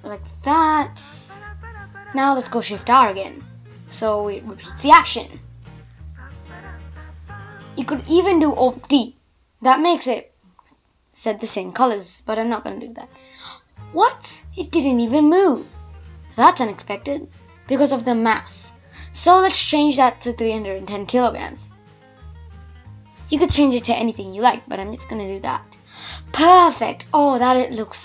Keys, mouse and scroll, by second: 1.2-1.6 scroll down 1, 3.7-4.9 typing, 5.1-5.9 scroll down 3, 5.9 shift+r, 6.3 shift+r, 7.3-7.8 middle drag, 7.8 space, 8.8 click, 9.2-15.1 middle drag, 15.1 space, 15.4 click, 16.1 click, 18.6 click, 20.7 shift+Left, 21.1 space, 22.2-22.8 middle drag, 22.8 scroll up 1, 23.0-26.0 middle drag.